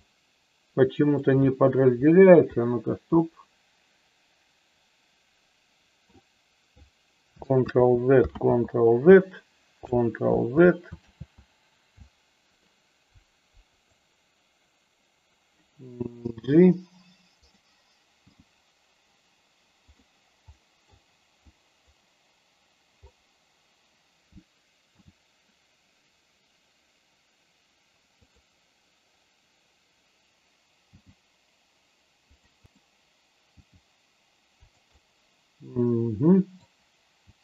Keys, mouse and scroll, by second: 0.0 shift+middle click, 3.1-6.0 middle drag, 7.5 ctrl+z, 8.3 ctrl+z, 10.3 ctrl+z, 10.9 ctrl+z, 13.6 click, 16.3 g, 17.3 click, 18.2 g, 19.8 click, 20.5 middle click, 21.4 click, 24.9 s, 28.1 click, 30.9 g, 32.6 click, 33.5 g, 34.8-36.6 middle drag, 37.1 g.